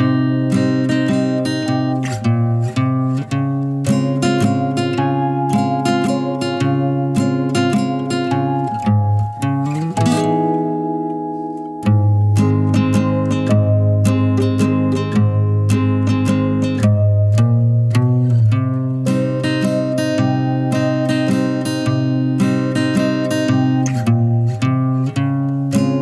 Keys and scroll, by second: 2.7 typing, 5.4-5.8 typing.